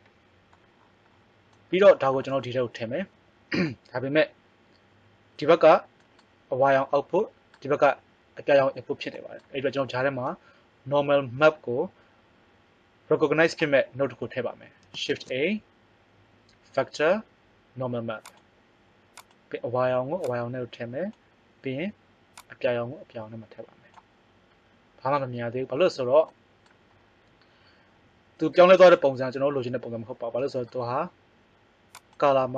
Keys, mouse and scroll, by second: 15.1 shift+a, 20.2-24.6 right drag, 26.2-27.7 middle drag, 31.9-32.5 drag.